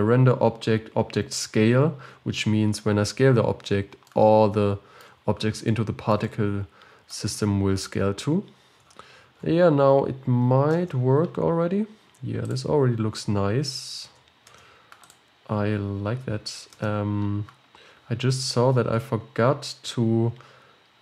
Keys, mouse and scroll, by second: 4.4-7.4 middle drag, 7.4-8.9 scroll up 12, 8.9-9.9 scroll down 13, 9.9 KP_0, 10.7 space, 12.6 click, 14.1 space, 14.5 space, 15.1 click, 16.9 space.